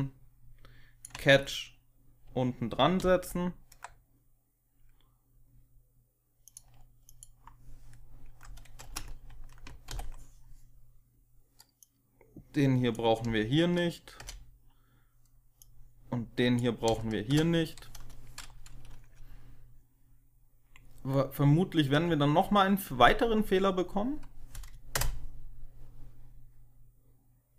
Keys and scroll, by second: 2.9 ctrl+c, 8.7 space, 9.8 ctrl+v, 13.1 Delete, 14.1 ctrl+v, 16.2 Delete, 16.8 Delete, 16.8 BackSpace, 17.2 BackSpace, 21.8 F5, 24.8 Return.